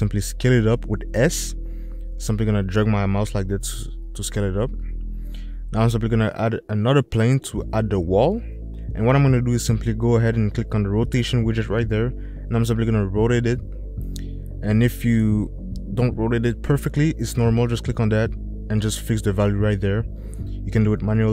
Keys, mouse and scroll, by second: 2.0 s, 9.2-11.2 drag, 19.5 click, 20.8-21.3 drag.